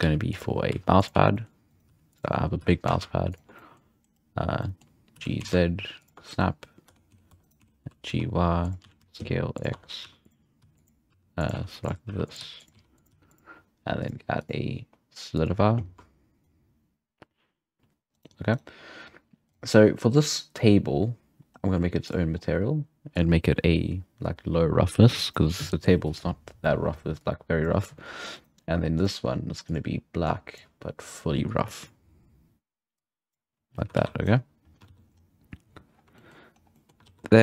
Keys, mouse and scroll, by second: 0.0-2.6 typing, 0.6-1.0 scroll up 4, 3.6-4.0 middle drag, 4.6-5.0 middle drag, 5.0 scroll up 2, 5.2 g, 6.9 Tab, 7.1-13.1 typing, 7.4 right click, 9.8 Tab, 14.0 click, 14.4-16.0 drag, 16.4-17.8 shift+drag, 17.8 g, 18.5-18.9 right drag, 19.4 click, 20.6-21.0 scroll down 2, 21.6-22.0 scroll up 2, 22.0 click, 22.4-23.2 scroll down 1, 23.2-26.2 drag, 27.2-28.4 drag, 28.4 right click, 29.0-29.7 drag, 31.4-34.0 drag, 34.0 alt+a, 34.2-34.6 right drag, 34.6 scroll down 5, 34.9 alt+a, 35.1-36.0 scroll up 4, 36.0 scroll down 1, 36.2-36.5 shift+middle drag, 36.5 scroll down 1, 36.7-37.2 middle drag, 37.0 alt+a, 37.2 scroll down 1.